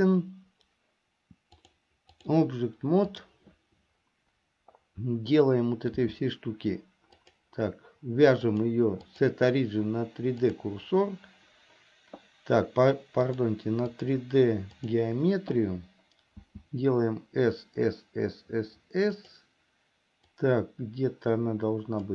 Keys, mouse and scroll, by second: 1.7 click, 3.2 click, 6.1 s, 8.6-10.8 drag, 13.5-15.2 drag, 16.5 s, 20.4-22.1 drag.